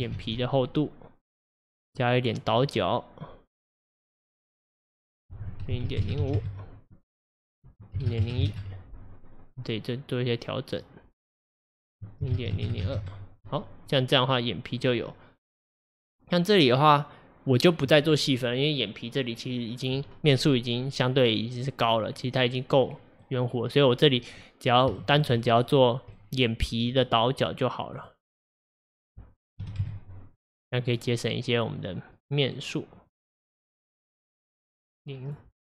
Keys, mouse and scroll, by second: 0.3 alt+z, 0.7-1.7 middle drag, 1.7-2.0 scroll up 3, 2.0-3.7 middle drag, 3.7-12.8 drag, 12.8 KP_0, 13.9-15.8 middle drag, 15.8-16.2 scroll down 2, 16.2-19.3 middle drag, 20.3-21.9 scroll down 1, 21.9-23.5 middle drag, 23.5-24.2 scroll up 5, 25.0-25.9 shift+middle drag, 25.9-26.2 scroll up 1, 26.2-28.0 middle drag, 28.0-30.8 drag, 30.8 scroll down 1, 31.3-33.1 middle drag, 33.1-35.6 drag.